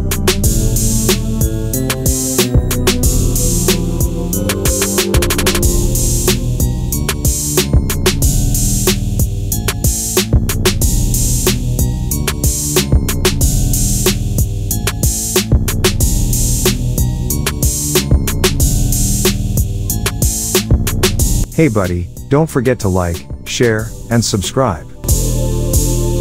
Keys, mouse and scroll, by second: 0.9 alt+scroll down 1, 1.2 click, 1.4 alt+scroll down 1, 1.7 click, 2.0 alt+scroll up 1, 2.6 click, 4.7 ctrl+a, 6.7 Caps_Lock, 7.1-11.6 typing, 13.1 click, 15.3 click, 17.2 ctrl+a, 19.1 BackSpace, 21.4 click, 23.5-26.1 drag, 24.6-25.9 shift+drag.